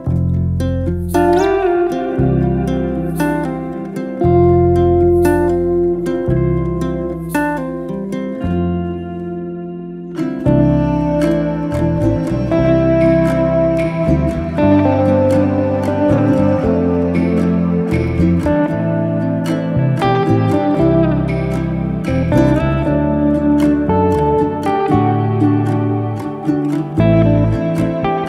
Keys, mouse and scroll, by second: 0.0 middle click, 0.3 click, 0.7 click, 1.0 shift+click, 1.6 ctrl+KP_Subtract, 2.2-3.7 middle drag, 4.7 middle click, 5.5 click, 5.8 Tab, 6.0-6.5 middle drag, 6.5 click, 6.8-8.4 middle drag, 8.4 g, 10.8-11.4 middle drag, 11.4-12.5 scroll up 1, 12.5-12.9 scroll up 1, 12.9-14.4 middle drag, 16.7 ctrl+z, 17.9 KP_1, 18.6-20.0 middle drag, 20.0 click, 20.4-20.7 scroll up 1, 20.7 z, 22.0 s, 25.7 middle click, 26.2 scroll down 2, 26.4-27.4 middle drag, 27.4 alt+z, 27.7 middle click.